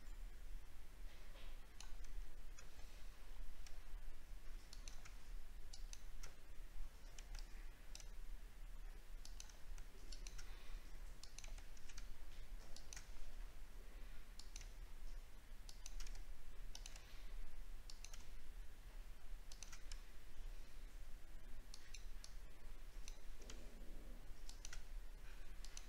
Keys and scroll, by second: 2.8 alt+scroll up 1.